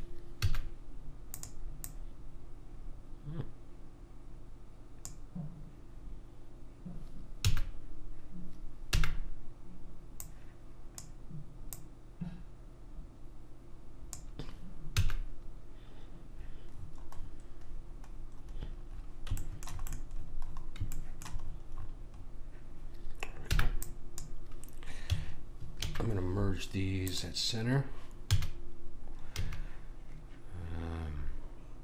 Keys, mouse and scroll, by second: 0.4 a, 1.3 click, 7.4 a, 9.0 b, 11.7 click, 14.9 a, 16.8-19.4 middle drag, 19.6 middle click, 21.0 middle click, 21.2 middle click, 23.5 b, 25.8 alt+m, 28.3 a, 29.4 a.